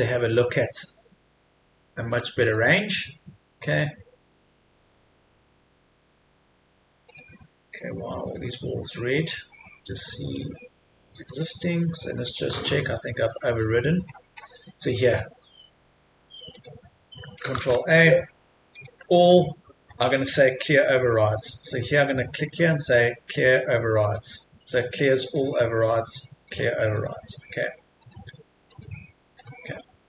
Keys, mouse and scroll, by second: 2.4 click, 12.3-13.2 typing, 13.7-16.6 scroll down 1, 16.6 click, 18.8 click, 20.8-21.4 scroll down 1, 21.4-28.7 drag.